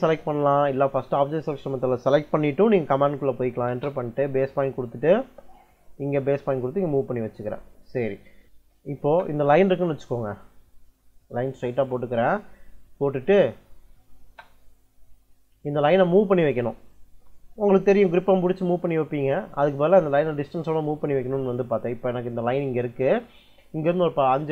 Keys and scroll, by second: 3.5 space, 8.4 l, 8.9 space, 11.6 ctrl+l, 14.1 space, 19.9 Escape, 20.0 `, 20.1 Escape.